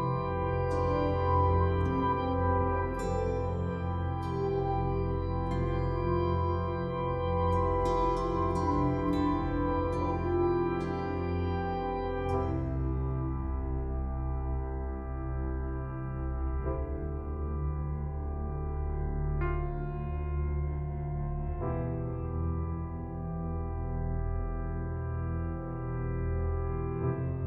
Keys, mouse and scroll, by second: 1.1 click, 12.7 Delete, 14.0 right click, 15.9 click, 16.5 scroll down 1, 17.4-17.7 scroll up 1, 20.4 click, 26.8 click.